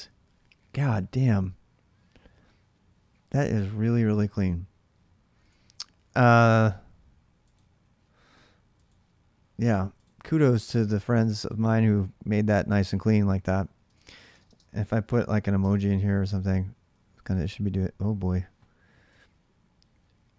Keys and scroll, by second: 3.9 alt+Tab, 5.2 alt+Tab, 10.2-12.1 typing, 13.4-17.5 typing.